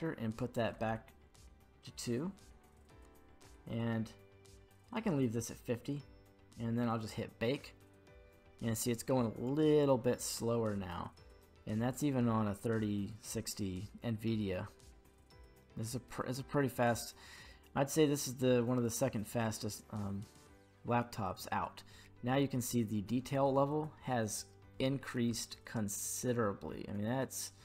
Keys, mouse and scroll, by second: 2.1-5.5 scroll down 5, 5.5-7.0 scroll down 1, 7.0-21.0 drag, 7.0-20.7 scroll down 1, 22.9-23.3 scroll up 3, 23.3-24.5 middle drag, 25.4-27.6 ctrl+middle drag.